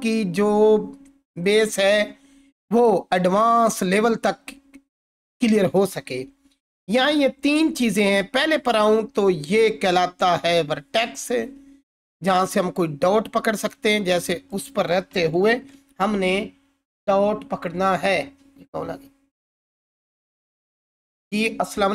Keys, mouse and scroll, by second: 15.6 ctrl+4.